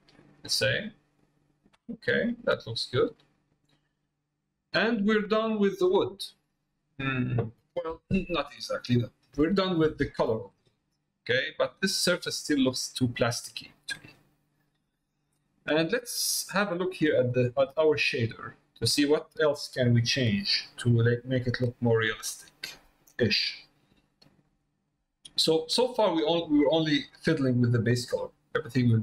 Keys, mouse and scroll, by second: 0.5 middle click, 2.6 middle click, 3.9 middle click, 5.1 middle click, 11.1 middle click, 12.5 middle click, 14.3 middle click, 15.2 middle click, 16.1 middle click, 17.1 middle click, 17.8-19.1 drag, 19.7 click, 21.5 click, 22.4 middle click, 24.0 middle click, 25.6 middle click.